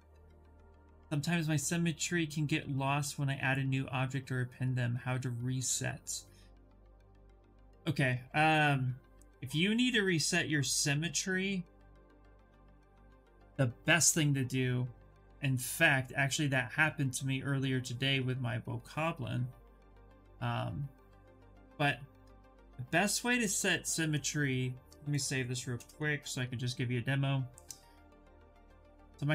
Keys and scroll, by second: 25.4 Return.